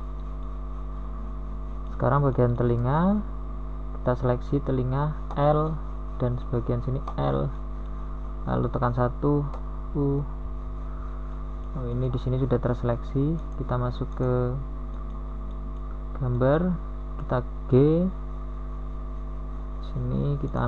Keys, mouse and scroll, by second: 0.3 g, 2.4 s, 4.9 g, 7.6 Tab, 7.8 KP_1, 11.6 Tab, 12.2 a, 12.4 z, 13.0 z, 13.8 l, 14.3 middle click, 14.4 middle click, 15.6 l, 16.0 middle click, 16.5 KP_1.